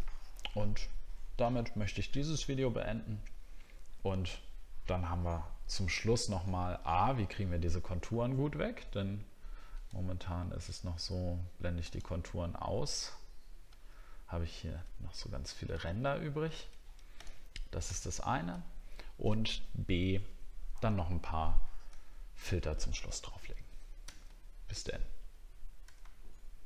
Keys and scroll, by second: 7.7-8.5 alt+scroll up 3, 13.7 alt+scroll down 1, 14.3 alt+scroll up 1, 15.7 alt+scroll down 1, 18.1-18.4 alt+scroll down 2, 21.9 alt+scroll down 1, 24.0 ctrl+s.